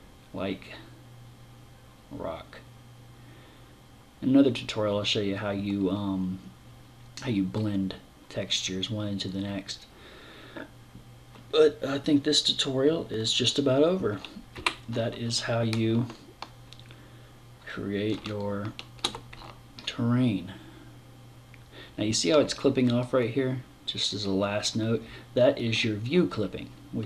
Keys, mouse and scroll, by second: 14.0 Escape, 14.7 scroll down 3, 15.6 middle click, 17.8 shift+middle click, 18.9 middle click, 26.5 click.